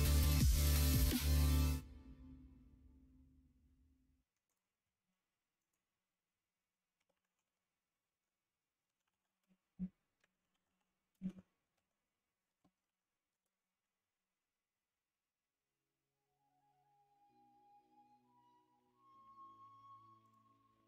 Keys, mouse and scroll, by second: 0.0 middle click.